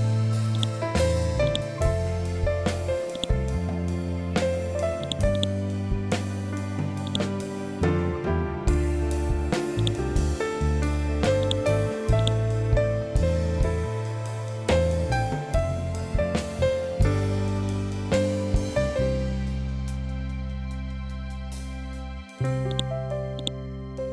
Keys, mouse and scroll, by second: 0.0-3.9 drag, 3.9 ctrl+z, 4.5-9.3 drag, 10.1 l, 10.9 click, 12.6 Left, 22.2 click, 23.5 b.